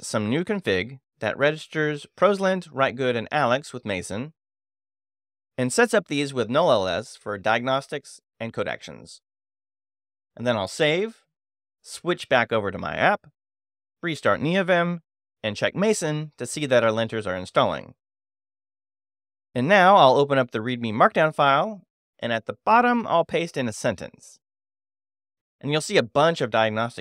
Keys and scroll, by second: 1.3 super+v, 2.4 Escape, 3.1 g, 9.6 Escape, 9.9 shift+;, 10.1 shift+w, 10.2 Return, 13.9 ctrl+space, 14.0 ctrl+l, 14.2 Escape, 14.8-15.8 typing, 15.3 Return, 15.9 Return, 17.3 shift+m, 17.4 shift+a, 17.5 s, 17.7 Return, 20.5 q, 21.8-22.8 typing, 23.2 Return, 24.7 shift+g, 25.4 o, 25.6 Return, 26.2 super+v, 26.8 Return.